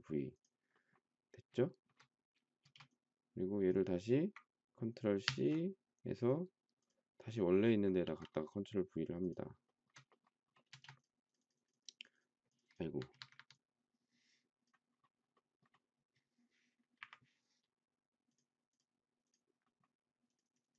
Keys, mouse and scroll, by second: 1.6 shift+middle click, 2.6 space, 5.2 ctrl+c, 8.0 ctrl+v, 9.6 shift+middle click, 10.7 space, 13.0 Escape, 13.2 Escape, 13.4 Escape, 17.0 Delete.